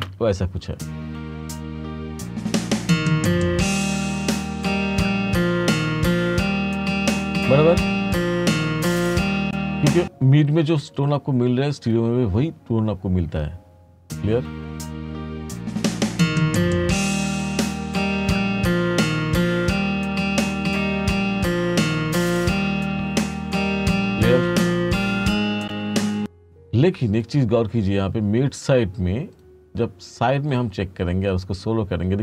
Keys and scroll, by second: 0.0 space, 9.4 space, 13.4 space, 25.7 space.